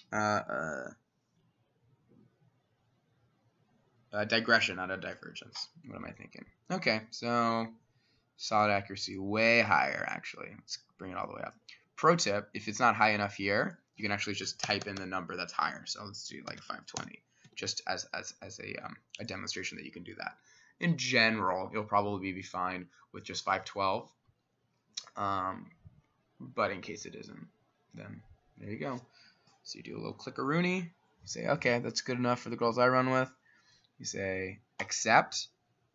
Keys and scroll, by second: 14.7 BackSpace, 14.9 BackSpace, 15.0 BackSpace, 16.3-17.5 typing, 19.1 typing, 23.2-23.9 typing.